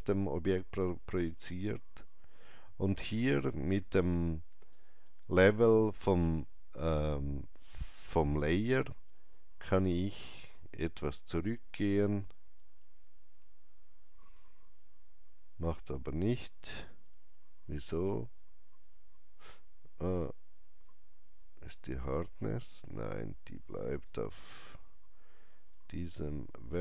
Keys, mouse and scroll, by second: 4.5 Return, 4.5 click, 4.5 KP_5, 9.1 KP_Enter, 9.1-16.7 drag, 20.8-26.3 drag, 25.6-26.3 scroll down 1, 26.3-26.8 scroll down 1.